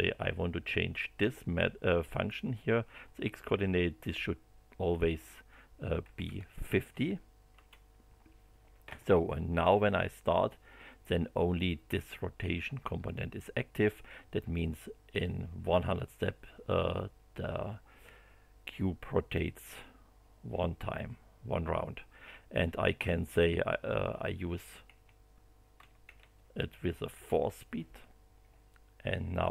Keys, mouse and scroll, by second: 2.1 click, 5.8-6.7 typing, 7.5 Return, 10.3 click, 22.7 click, 23.3 click, 24.0 BackSpace, 24.9 End, 27.1 4, 29.3 click.